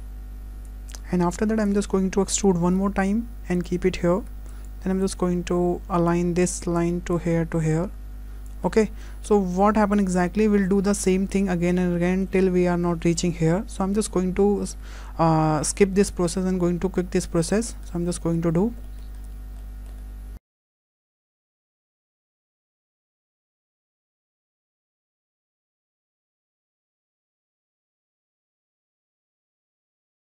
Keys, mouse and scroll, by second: 0.7 click, 3.6 click, 3.6 z, 3.6 e, 6.1 click, 8.5 click, 8.7 scroll down 3, 9.5-10.2 scroll up 2, 10.3 shift+middle click, 10.5 scroll, 10.8-11.4 scroll down 2, 11.4 scroll down 4, 11.6 shift+middle click, 12.6 scroll down 1, 12.7 shift+middle click, 17.4 shift+middle click, 17.8-18.1 scroll up 4, 18.2 shift+middle click, 18.5-18.9 scroll up 2, 18.9 shift+middle click, 19.3 scroll up 3, 19.6 shift+middle click, 20.1-20.4 scroll down 1, 20.4 click, 20.5 click, 20.7 shift+middle click, 21.0-25.2 typing, 21.3 click, 21.7 click, 21.8 click, 21.9 click, 22.2 click, 22.5 shift+middle click, 22.9 click, 23.1 click, 23.2 click, 23.3 click, 23.5 shift+middle click, 23.7 click, 23.8 click, 23.9 shift+middle click, 24.0 click, 24.1 click, 24.3 shift+middle click, 24.6 click, 24.9 shift+middle click, 25.0 shift+middle click, 25.1 click, 25.2 shift+middle click, 25.5 click, 25.7 shift+middle click, 26.0 click, 26.3 click, 26.4 shift+middle click, 26.5 shift+middle click, 26.5-29.3 typing, 26.7 click, 27.0 shift+middle click, 27.2 click, 27.3 click, 27.5 click, 27.7 click, 28.0 click, 28.0 shift+middle click, 28.1 click, 28.5 click, 28.7 click, 29.0 shift+middle click, 29.4 scroll up 2, 29.5 click, 29.5 click, 29.6 scroll down 1, 29.8 shift+middle click, 30.1 click, 30.2 click.